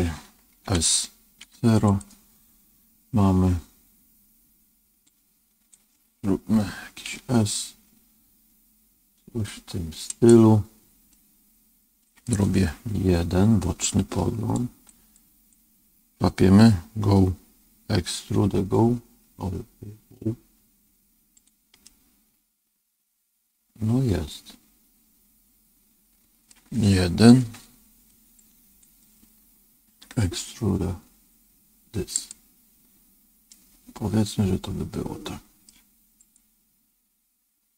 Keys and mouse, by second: 0.6 s, 5.1-7.0 drag, 7.0 s, 11.0-12.2 middle drag, 13.0 KP_1, 14.5 click, 15.2 click, 18.3 e, 21.8-26.4 middle drag, 27.3 KP_1, 28.4 click, 30.1 e, 33.4-35.6 middle drag, 36.2 click.